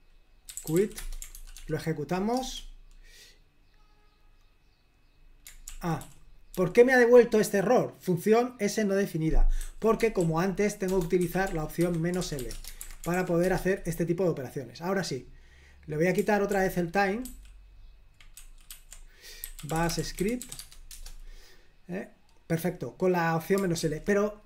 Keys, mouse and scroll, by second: 0.3-1.3 typing, 1.4 ctrl+p, 1.6 ctrl+p, 2.4 Return, 5.7 super+l, 6.1 k, 6.6 j, 9.6-12.8 typing, 11.8 Escape, 12.9 super+h, 13.2 ctrl+p, 13.5 Return, 16.6 ctrl+p, 17.3 ctrl+w, 18.5 ctrl+w, 18.8 ctrl+w, 19.3-21.7 typing, 23.8 super+l.